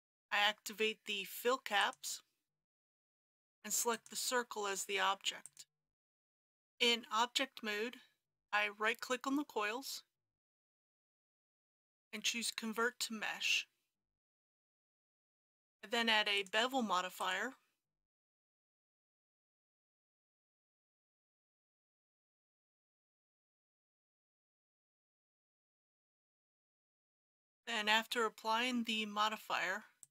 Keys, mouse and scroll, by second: 6.2 Tab, 10.1 right click, 14.3 click, 22.5 KP_Decimal, 22.7 KP_2, 24.2 click, 25.7 KP_1, 26.0 KP_0, 27.0 scroll up 1, 27.4 click.